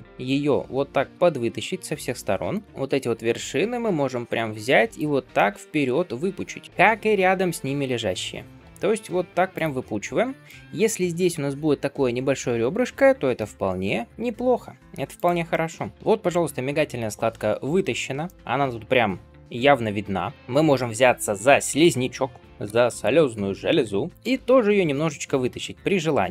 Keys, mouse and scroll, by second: 0.0 click, 0.2 middle click, 1.0 g, 5.2-6.6 middle drag, 9.8 middle click, 10.5-11.1 scroll up 4, 11.1-12.6 middle drag, 12.6-13.0 scroll down 2, 13.2-14.3 middle drag, 14.3-15.0 scroll up 2, 15.0 click, 15.3 middle click, 15.9-16.3 scroll down 2, 17.1-17.5 scroll up 1, 17.8-18.1 scroll down 2, 18.1 middle click, 18.3 alt+shift+z, 18.3 scroll up 1, 18.6-20.3 middle drag, 24.1 middle click, 24.1 g.